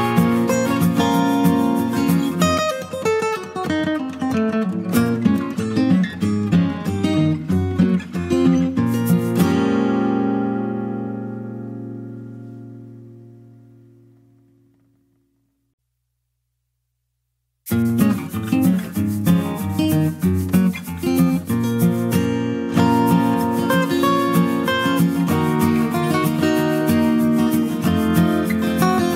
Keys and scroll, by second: 0.0-0.8 typing, 2.0 Return, 3.5 typing.